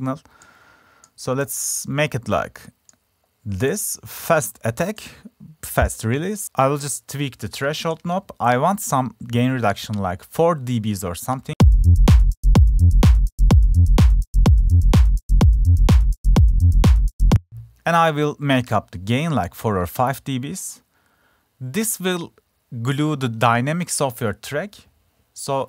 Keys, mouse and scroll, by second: 15.3 click, 16.3 drag, 22.8 click, 23.0 click.